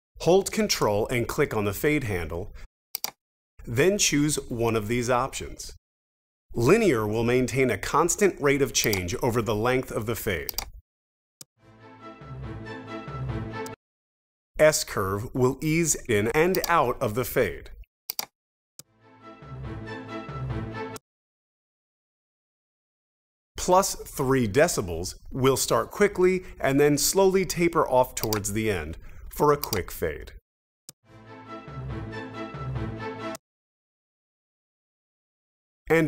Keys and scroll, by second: 11.3 space, 13.6 space, 18.7 space, 20.9 space, 30.8 space, 33.3 space.